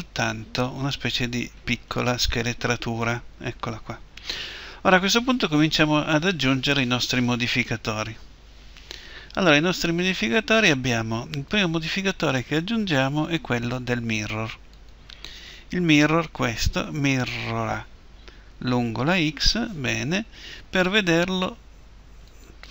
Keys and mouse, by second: 9.8-14.9 drag, 22.3-22.7 drag.